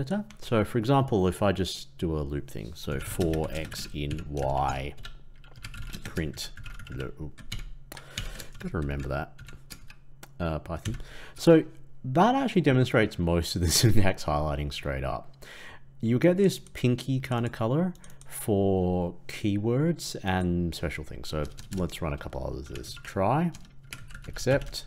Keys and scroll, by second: 7.4 ctrl+Left.